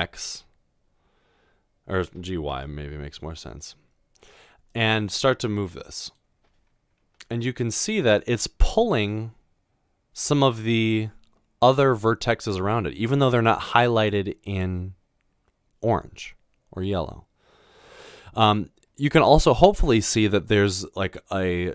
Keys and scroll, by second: 2.5 typing.